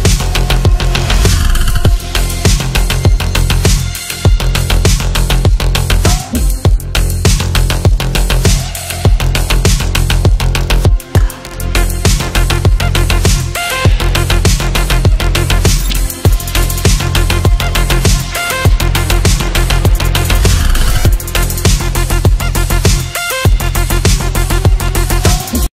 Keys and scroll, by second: 0.2 Delete, 2.9 Escape, 10.3 ctrl+g, 11.1 F3, 11.4 Escape, 14.9 Delete, 15.9 shift+F2.